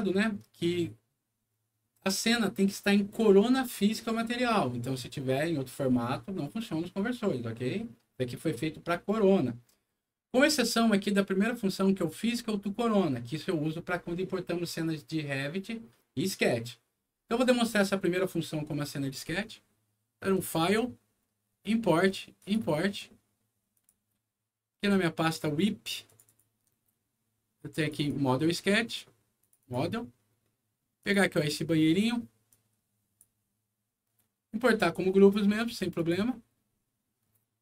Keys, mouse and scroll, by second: 20.3 click, 22.3 click, 23.7 click, 24.7 scroll down 1, 26.0 click, 26.2 click, 27.7 click, 27.9 click, 29.3 click, 29.5 click, 30.9 click, 32.4 click, 35.9 click.